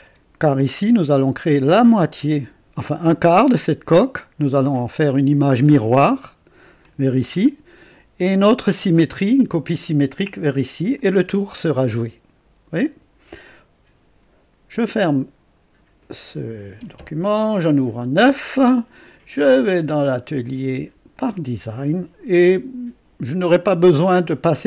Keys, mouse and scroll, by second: 6.8 click, 8.2 click, 10.9-14.1 drag, 15.9 click, 17.9 click, 21.3 click.